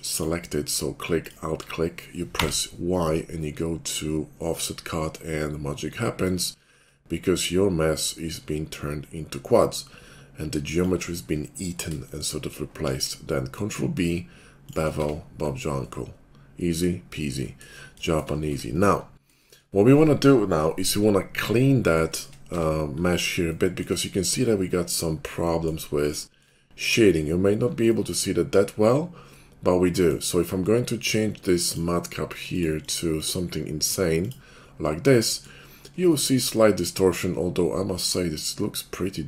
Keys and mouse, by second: 0.1-1.2 middle drag, 1.2 alt+click, 1.3-6.9 alt+middle drag, 2.4 y, 6.9-14.7 shift+drag, 12.8 ctrl+b, 14.7-19.2 shift+middle drag, 14.9 Tab, 18.5 Tab, 19.2 shift+click, 19.6-22.0 middle drag, 22.0 shift+click, 22.3-31.6 middle drag, 22.5 Tab, 31.6-39.2 drag.